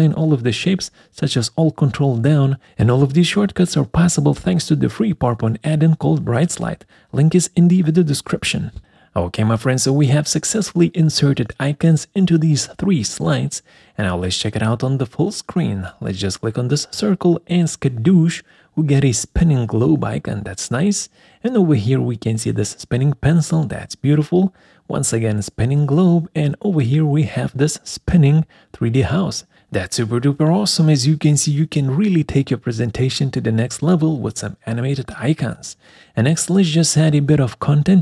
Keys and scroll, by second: 6.8 Delete, 36.1 Escape.